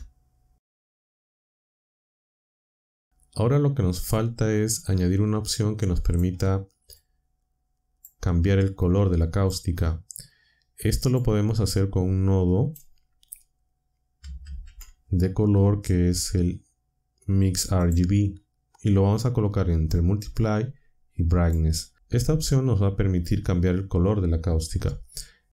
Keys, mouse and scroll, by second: 4.9-6.3 drag, 7.0-8.2 drag, 8.6-9.6 drag, 10.3-11.3 drag, 14.4 shift+a, 17.8 click, 21.4 click, 22.6-23.6 drag.